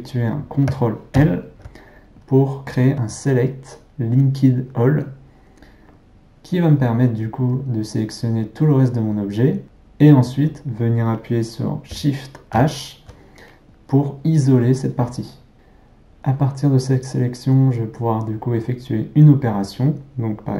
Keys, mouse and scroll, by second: 1.2 ctrl+l, 9.6 ctrl+z, 12.6 shift+h, 15.5 ctrl+z.